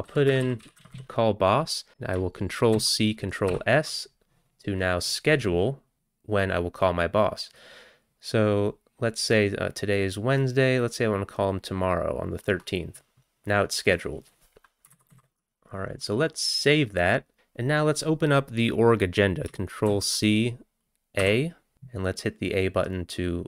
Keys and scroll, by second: 0.0-1.9 typing, 1.9 ctrl+c, 1.9 ctrl+g, 2.8 ctrl+c, 3.5 ctrl+s, 5.1-5.8 typing, 15.0 ctrl+x, 15.1 ctrl+s, 20.0 ctrl+c.